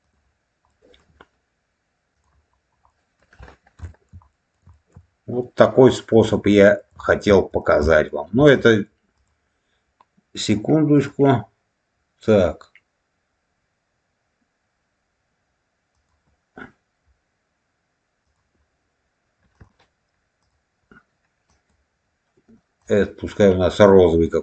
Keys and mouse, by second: 0.6 middle click, 2.0 click, 2.8 middle click, 3.8 shift+middle click, 4.2 middle click, 4.6 shift+middle click, 6.0 click, 6.5 middle click, 6.9 shift+middle click, 7.5 click, 7.8 middle click, 8.5 middle click, 9.1 click, 10.9 click, 15.8 click, 18.2 click, 19.5-24.2 drag.